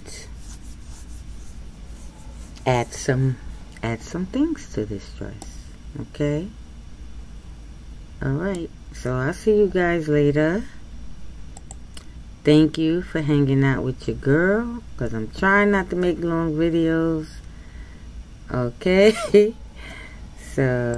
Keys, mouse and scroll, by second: 5.5-8.5 middle drag.